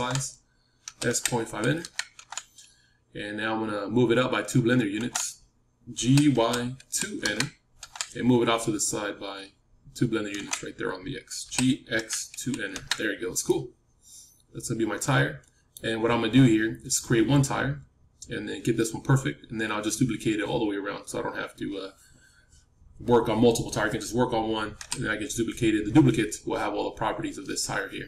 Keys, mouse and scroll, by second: 0.8 s, 4.9 s, 5.9 g, 11.4 g, 13.4-15.9 middle drag, 24.7 KP_7.